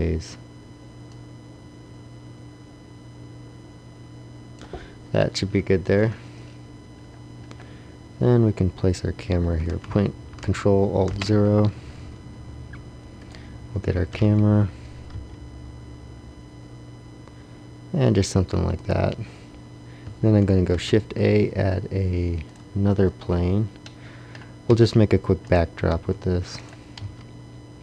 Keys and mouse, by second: 11.1 ctrl+alt+KP_0, 13.9 g, 20.7 shift+a, 24.6 s, 25.8 s, 27.0 s.